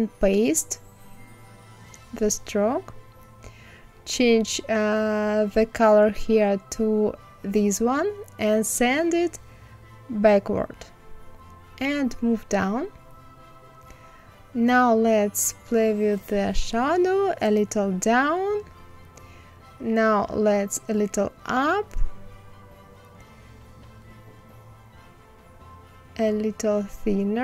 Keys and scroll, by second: 10.7 Down.